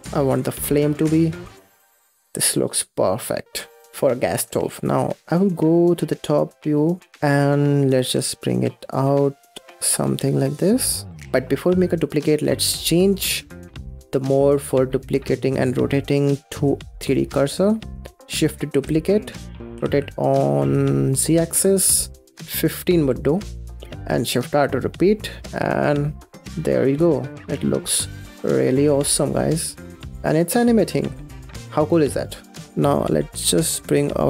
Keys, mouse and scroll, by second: 0.3 g, 0.7 Tab, 0.8 middle drag, 1.0 click, 1.1 middle click, 1.2 space, 1.5-3.9 middle drag, 3.9-4.3 scroll up 10, 4.3-5.8 middle drag, 5.9 click, 6.5 scroll up 4, 6.7 scroll down 6, 7.8 g, 11.1-14.3 shift+middle drag, 17.0-17.4 drag, 17.8 scroll down 2, 18.7 shift+d, 22.3 shift+d, 23.4-27.2 typing, 27.4 scroll up 5, 27.5-29.0 middle drag, 29.0 scroll up 5, 29.8 scroll down 8, 30.1-31.9 middle drag, 32.2 space, 32.5 scroll down 3.